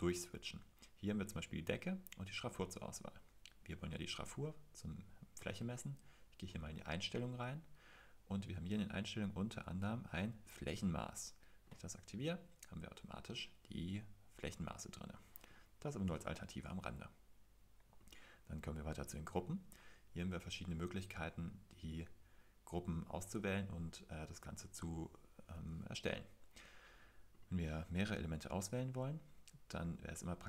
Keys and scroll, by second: 1.6 Tab, 6.6 super+t.